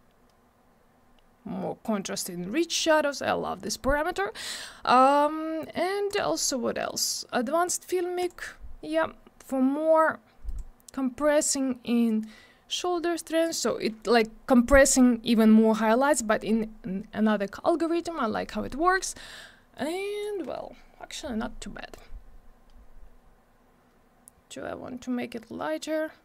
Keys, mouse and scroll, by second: 6.1 click, 8.2 click, 10.4 click, 12.0 click, 19.7 click, 21.9 click.